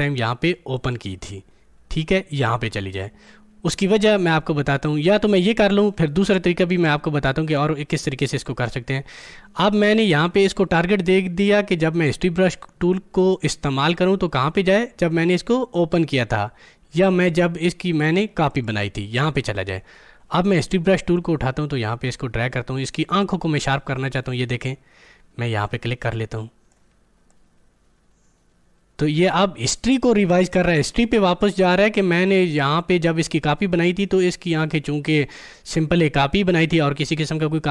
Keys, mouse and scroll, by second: 0.7 click, 8.2 click, 9.3-20.6 drag, 20.8 click, 23.6-37.7 drag.